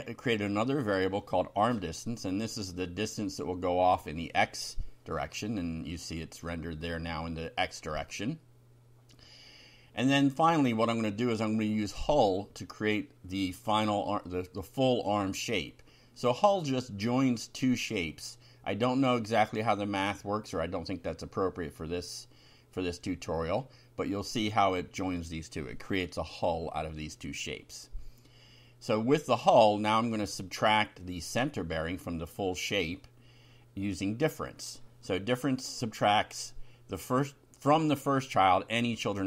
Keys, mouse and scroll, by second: 0.2 click, 1.2 ctrl+c, 1.8 ctrl+click, 2.2 ctrl+v, 3.6-5.6 typing, 6.1 F5, 9.9 ctrl+r, 10.5 ctrl+Down, 13.2 click, 14.1 Return, 14.7 Up, 15.5-17.7 typing, 18.1 Down, 18.7 End, 18.9 Return, 19.9 shift+], 20.2 shift+Up, 21.5 shift+Home, 21.7 shift+Down, 22.9 Tab, 23.6 Down, 23.9 Up, 24.1 Tab, 24.5 Down, 26.3 F5, 28.5 ctrl+r, 29.4 ctrl+Up, 31.0 click, 31.9 Return, 33.3-37.4 typing, 37.4 shift+Down, 37.8 shift+Home, 38.1 shift+Down.